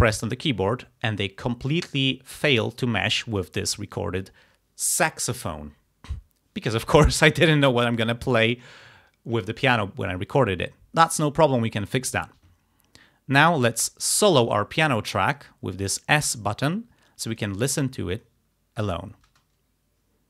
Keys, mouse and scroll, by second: 3.4 click, 16.0 click, 17.4 click, 19.3 space.